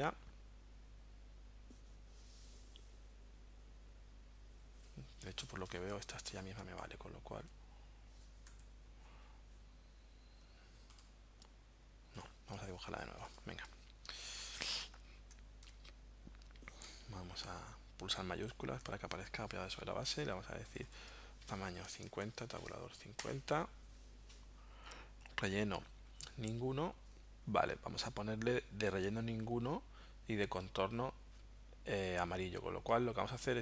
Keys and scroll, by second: 5.5 v, 8.5 a, 21.6-22.9 typing, 23.2 Return.